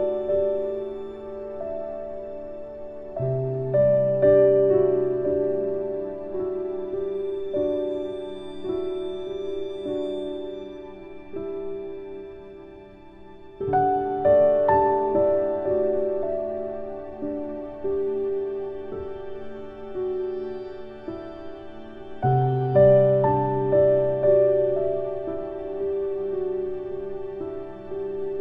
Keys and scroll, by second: 10.4 ctrl+z, 15.2 ctrl+k.